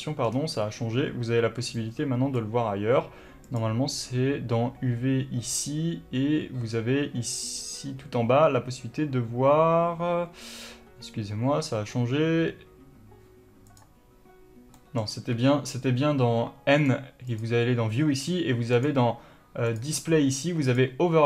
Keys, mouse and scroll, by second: 0.3-0.7 scroll down 1, 0.7-1.8 scroll up 1, 1.8 click, 3.5-14.0 drag, 14.0 n, 15.1-17.1 middle drag, 15.5 n, 17.1 click, 17.6 click, 19.0 click, 20.0 click, 20.9 click.